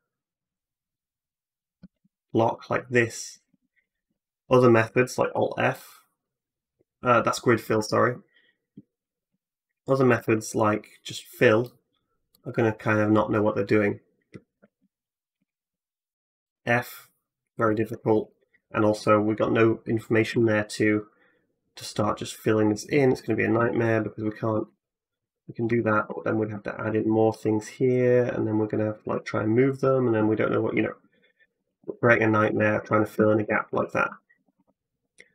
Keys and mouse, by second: 0.4 ctrl+middle click, 0.7 ctrl+click, 0.8 ctrl+middle click, 1.1 ctrl+click, 1.5 ctrl+middle click, 1.6 ctrl+click, 1.7-3.8 ctrl+middle drag, 1.8 x, 3.3 2, 3.8 alt+click, 3.8 alt+middle click, 5.0 alt+f, 5.2-7.1 middle drag, 7.6 ctrl+z, 7.7-10.6 middle drag, 10.0 ctrl+f, 15.2 ctrl+z, 16.3 f, 17.6 ctrl+z, 18.1 click, 18.9 shift+click, 20.1 f, 21.6 click, 22.3 shift+click, 23.4-25.6 typing, 24.0 click, 26.2 ctrl+r, 28.9 g, 30.1 click, 31.3 ctrl+z, 31.5 ctrl+z, 31.7 ctrl+z, 31.9 ctrl+z, 32.3 ctrl+z, 32.6 ctrl+z, 33.0 ctrl+z, 33.3 ctrl+z, 33.5 ctrl+z, 33.9 ctrl+z, 34.2 ctrl+z, 34.4 ctrl+z.